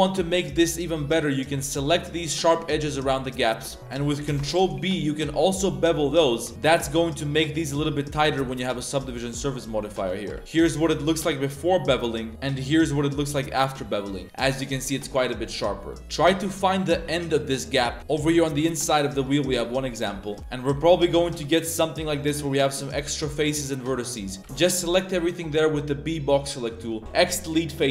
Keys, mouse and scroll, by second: 0.4 alt+right click, 1.7 z, 2.2 z, 2.8-3.4 middle drag, 3.6 z, 4.2 ctrl+b, 6.5 Tab, 6.6 a, 6.7 a, 6.8-7.9 drag, 8.4 Tab, 9.1 ctrl+z, 9.2 ctrl+z, 9.9 ctrl+z, 10.1 ctrl+z, 10.4 ctrl+z, 10.4-12.0 middle drag, 12.2 Tab, 12.3-14.8 middle drag, 15.3 middle click, 15.5 Tab, 15.9 middle drag, 16.0 Tab, 16.1 a, 16.3 a, 16.6 Tab, 16.9 Tab, 17.3-17.7 drag, 17.9 shift+click, 18.2 shift+drag, 18.7-19.3 drag, 19.4 shift+drag, 19.9 middle click, 20.2 shift+middle click, 20.4 z, 20.8 a, 20.9 a, 21.3 b, 22.0 click, 22.6-24.3 middle drag, 24.4 a, 24.4 b, 26.7 click, 27.0 x.